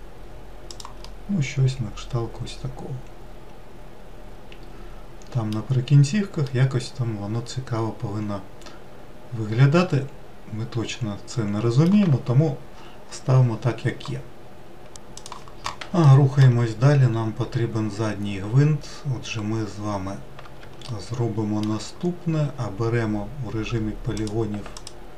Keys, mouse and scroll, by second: 0.6-3.8 middle drag, 6.0-9.1 middle drag, 15.4 middle click, 16.1-18.9 scroll up 7, 18.9-20.0 scroll up 2, 20.2-21.3 shift+middle drag, 21.3-21.9 scroll up 1, 23.5 click, 24.1 alt+click.